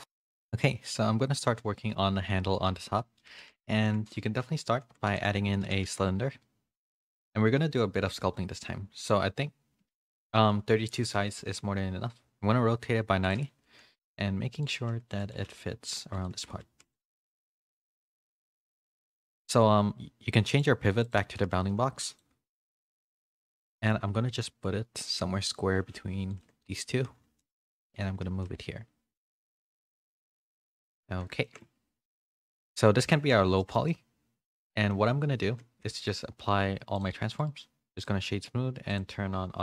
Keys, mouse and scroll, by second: 2.9 middle click, 4.1 a, 4.7 alt+h, 5.0 a, 5.8 a, 7.3 alt+h, 7.3 a, 7.5 s, 10.0 middle click, 12.1 r, 13.6 s, 14.7 g, 16.3 g, 16.6 s, 17.5 s, 18.0 g, 20.2 g, 20.5 click, 21.5 s, 22.7 KP_3, 23.3 z, 23.7 shift+middle click, 24.1 g, 26.7 middle click, 26.9 z, 27.7 s, 29.9 a, 30.1 a, 30.3 middle click, 31.4 shift+middle click, 32.5 shift+middle click, 33.6 shift+middle click, 33.8 middle click, 34.5 middle click, 35.8 ctrl+a, 38.8 click.